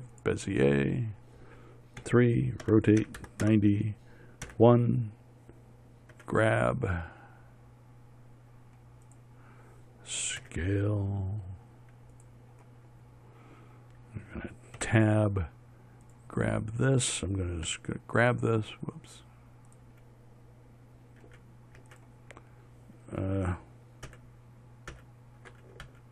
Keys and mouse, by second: 2.5 KP_3, 3.1 r, 4.9 KP_1, 6.6 g, 10.9 s, 15.3 Tab, 18.1 h, 21.7 h, 22.3 g, 24.5 shift+h, 25.4 shift+h.